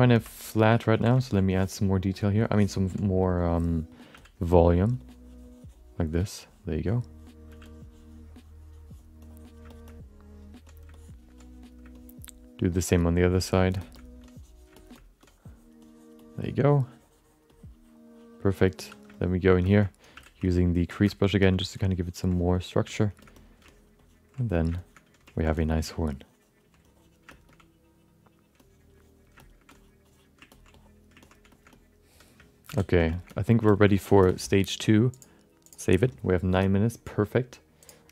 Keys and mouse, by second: 0.1 ctrl+middle click, 0.7 1, 0.9 f, 1.1 shift+middle click, 1.3 middle click, 2.2 click, 2.6 alt+middle click, 4.1 f, 4.6 click, 5.0 click, 5.4 click, 6.4 click, 7.5 f, 7.6-9.1 drag, 9.2 click, 9.7 shift+middle click, 9.8 alt+middle click, 10.6 click, 10.9 alt+middle click, 11.4 click, 11.9 alt+middle click, 12.9 click, 13.8 alt+shift+middle click, 14.2 click, 14.7 alt+shift+middle click, 14.9 middle click, 15.2 click, 15.8 click, 16.2-17.4 drag, 18.0 click, 18.8 2, 19.1 alt+middle click, 19.6 alt+shift+middle click, 19.8 middle click, 20.1 f, 20.4 ctrl+click, 21.1 shift+middle click, 21.2 middle click, 21.5 f, 22.3 click, 22.5 click, 22.9 click, 23.2 alt+middle click, 23.3 middle click, 23.7 ctrl+click, 24.0 ctrl+click, 24.4 click, 24.7 alt+shift+middle click, 25.5 alt+middle click, 26.0 ctrl+click, 26.8 click, 27.3 shift+middle click, 27.4 alt+middle click, 28.6 click, 29.4 shift+middle click, 29.7 click, 30.0 click, 30.5 ctrl+alt+middle click, 30.7 alt+middle click, 31.2 ctrl+alt+middle click, 31.5 alt+shift+middle click, 31.7 alt+middle click, 32.7 alt+m, 33.1 alt+shift+middle click, 33.3 alt+middle click, 33.6 shift+middle click, 35.2 click, 38.0-38.1 drag.